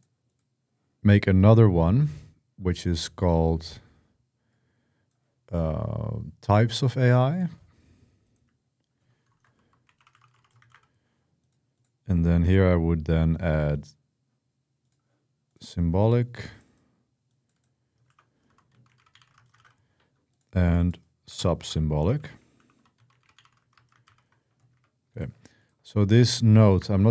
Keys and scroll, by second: 8.8-10.9 typing, 17.6-19.8 typing, 21.0-24.3 typing, 24.5 Escape.